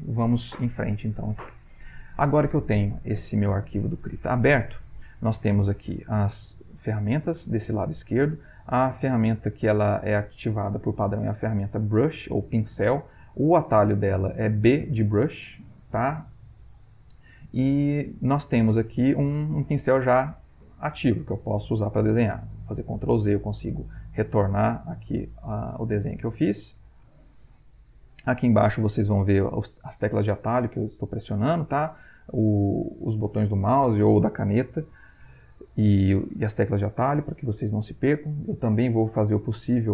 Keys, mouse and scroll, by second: 19.5-22.2 drag, 23.1 ctrl+z, 25.7 ctrl+z.